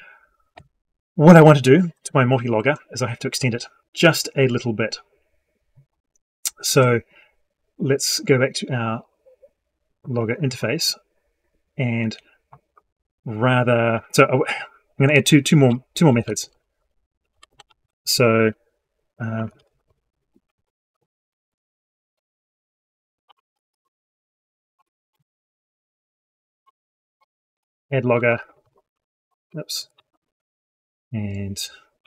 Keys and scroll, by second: 28.7 ctrl+x, 29.2 ctrl+z, 30.0 ctrl+v.